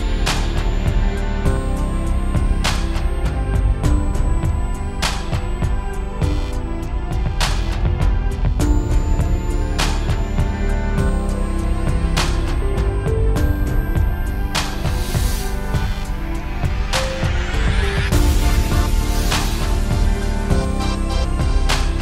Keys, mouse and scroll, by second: 0.2 click, 21.0 ctrl+space.